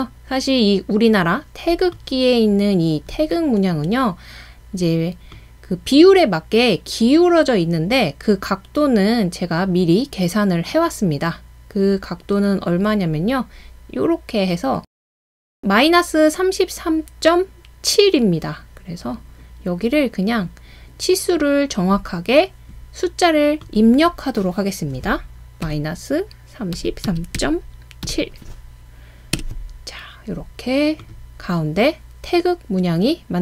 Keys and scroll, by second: 25.7 typing, 26.9-28.1 typing, 29.4 Return.